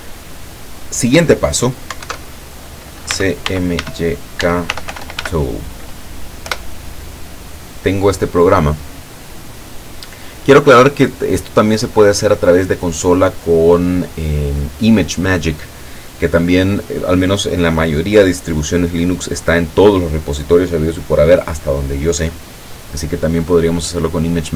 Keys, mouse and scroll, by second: 2.1 alt+F2, 2.9-5.8 typing, 6.6 Return.